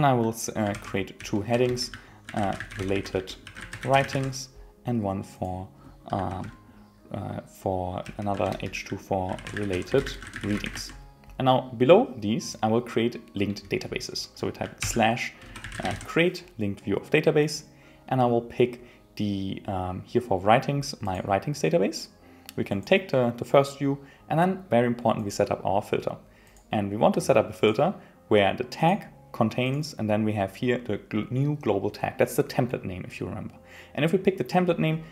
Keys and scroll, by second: 1.6 Return, 8.5 Return, 13.5 Return.